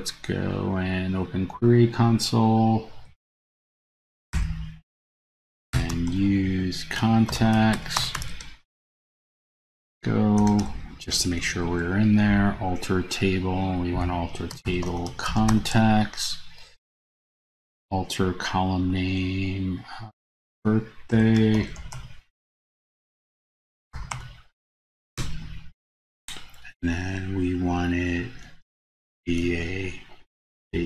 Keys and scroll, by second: 3.4 super+a, 11.8 super+v.